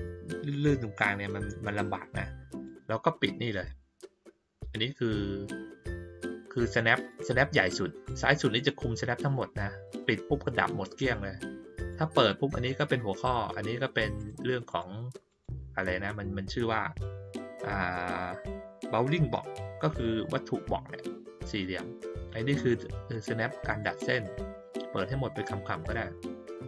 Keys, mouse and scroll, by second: 6.2 click, 6.9 click, 11.7 click, 14.1 click, 14.6 click, 15.2 click, 15.8 click, 22.5 click, 23.1 click, 23.6 click, 24.2 click.